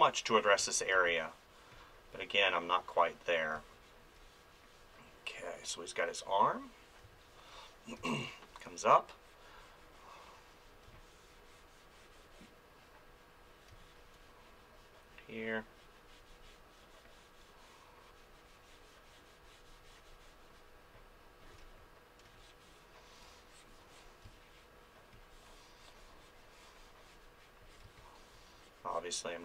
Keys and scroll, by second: 0.6 ctrl+z, 0.9 space, 3.5 space, 7.0 space, 10.8 space, 13.7 space, 21.5 space, 24.2 space, 27.8 space.